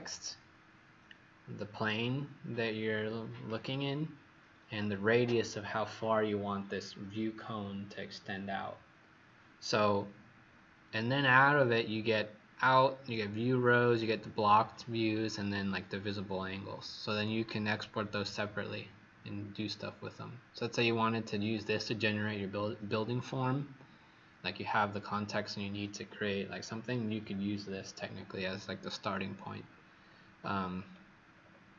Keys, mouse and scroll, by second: 30.3-31.7 scroll down 9.